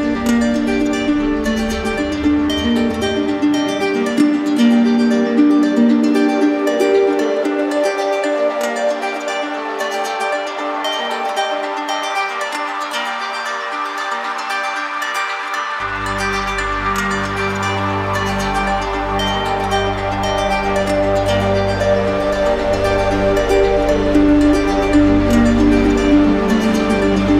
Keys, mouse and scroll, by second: 0.1 alt+click, 1.1 right click, 2.7-3.9 drag, 6.1-7.1 drag, 7.9 alt+click, 8.6 click, 11.3 click, 11.9 click, 13.4-14.4 right drag, 14.5-15.6 drag, 15.8-16.9 drag, 18.2-19.3 drag, 20.4-21.5 drag, 23.2 click, 23.6 click, 25.1-26.2 drag, 27.2-27.3 drag.